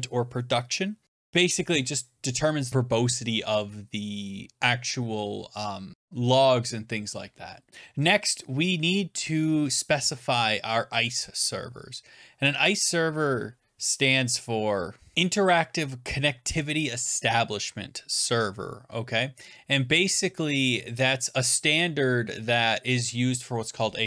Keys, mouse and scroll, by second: 15.1 click, 15.1 scroll down 10.